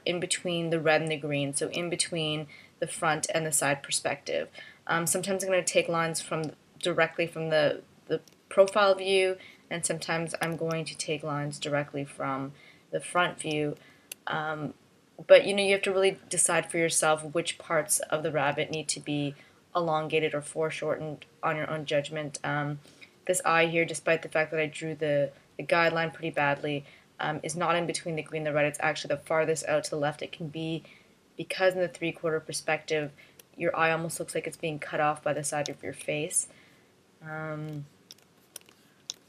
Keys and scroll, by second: 2.3 space, 10.6 space, 14.2 space, 20.2 space, 26.1 space, 33.5 space, 36.2 space, 38.7 space.